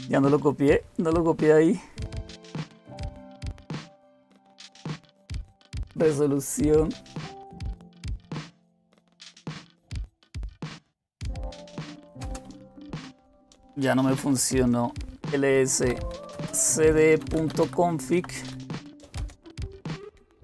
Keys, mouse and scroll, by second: 11.4-19.2 typing.